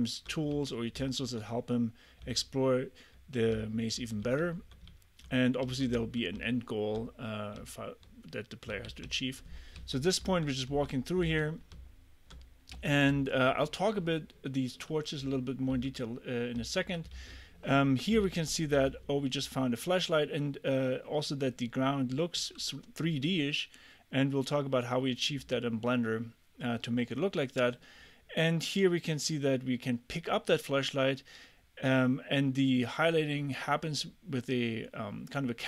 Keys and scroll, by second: 0.0-1.0 typing, 2.2 d, 4.0-6.9 typing, 8.7 d, 9.1 w, 9.8 a, 10.2 w, 11.3 d, 11.8 w, 12.7 a, 13.1 w, 15.7 d, 16.6 w, 17.1 d, 18.2 s, 18.7 d.